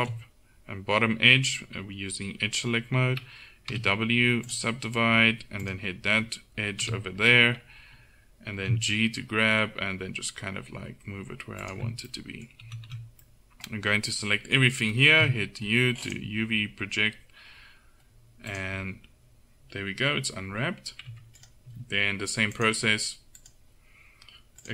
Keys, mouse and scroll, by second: 3.8 w, 5.7 click, 6.9 KP_7, 8.6 g, 12.7 a, 12.9 a, 15.3 u, 21.2 Tab.